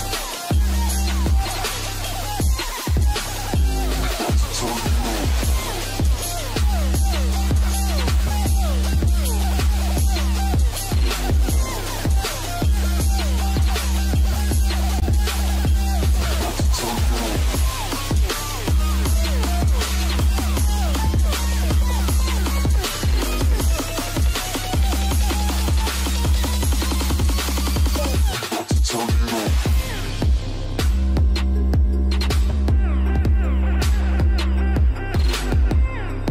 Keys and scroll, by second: 8.6 shift+Down, 9.5 shift+Down, 10.7 Down, 11.2 Up, 13.4 ctrl+space.